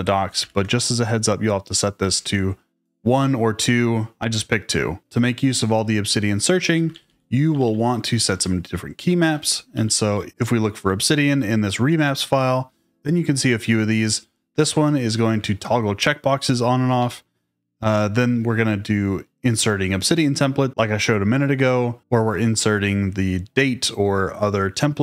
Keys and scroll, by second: 0.4 shift+v, 1.9 Escape, 6.8-10.8 typing, 8.2 Return, 14.5 shift+v, 15.2 Escape, 16.9 j.